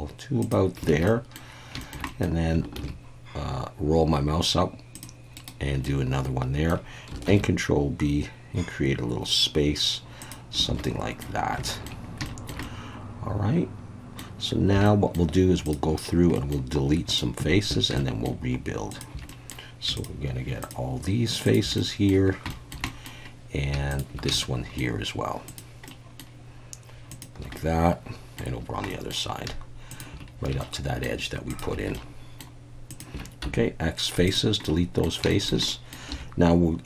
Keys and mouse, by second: 0.4 click, 0.9 alt+a, 1.0 middle click, 1.8 shift+middle click, 2.1 middle click, 2.8 ctrl+r, 5.4 right click, 5.8 middle click, 7.3 ctrl+b, 10.2 click, 10.7 alt+a, 10.8 middle click, 11.7 shift+middle click, 12.3 shift+middle click, 12.6-14.2 middle drag, 14.7 typing, 14.8 middle click, 16.3 middle click, 18.0 shift+middle click, 18.9 shift+click, 19.3 middle click, 20.0 shift+click, 21.5 shift+click, 21.8 middle click, 22.5 shift+middle click, 22.9 middle click, 24.4 shift+middle click, 25.9 shift+middle click, 27.1 shift+click, 27.6 middle click, 28.9 middle click, 29.9 shift+click, 30.6 shift+middle click, 31.5 shift+click, 31.9 shift+middle click, 32.9 shift+click, 33.4 x, 34.6 middle click, 35.3 shift+middle click, 35.7 middle click, 36.1 2.